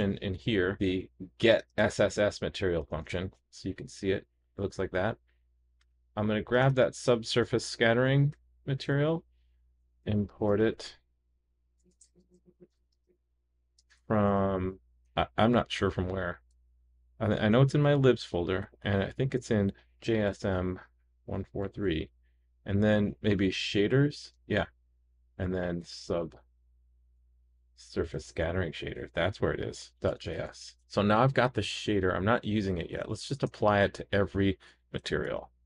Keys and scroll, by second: 7.6 super+c, 12.5 super+v, 30.7 super+s, 35.2 super+c.